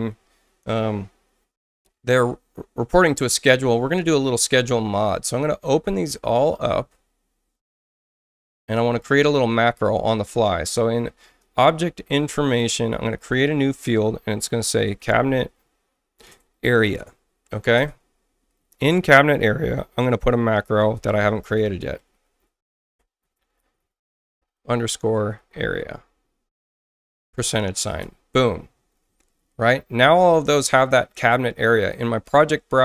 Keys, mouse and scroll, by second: 5.1 click, 11.4 click, 13.2 click, 14.6-17.6 typing, 17.8 Return, 19.1 click, 20.4-26.2 typing, 27.3 shift+5, 28.0 Return, 32.2 click.